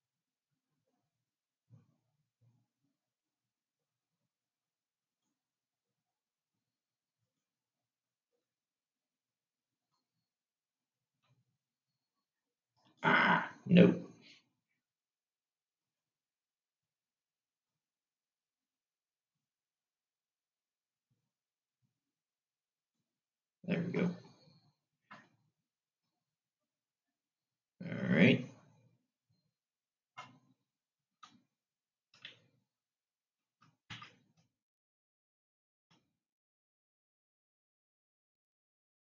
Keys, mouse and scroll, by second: 0.5-4.0 drag, 7.9 shift+click, 10.4 click, 16.0-18.8 drag, 34.5 Tab, 36.1 shift+a.